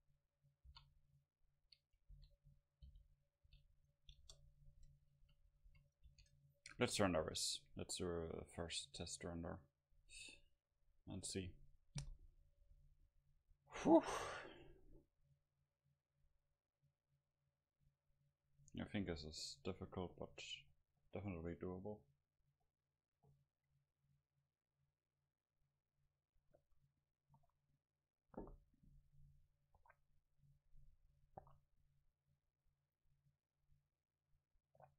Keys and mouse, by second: 0.7 r, 2.2 s, 2.9 g, 3.4-5.7 drag, 3.5 r, 4.2 KP_0, 5.3 a, 5.5 a, 5.7 a, 6.1 ctrl+s, 7.2 F12, 30.3-34.9 middle drag.